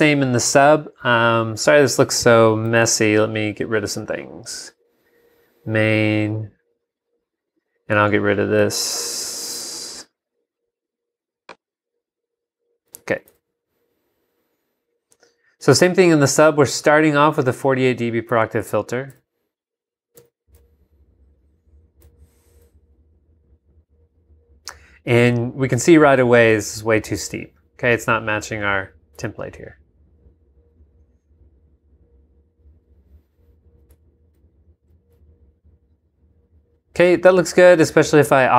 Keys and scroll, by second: 2.8 c, 13.3 super+Tab, 18.3 super+Tab, 19.1 super+v, 20.5 g, 22.0 v, 29.2 super+Tab, 33.9 super+Tab, 34.8 super+v.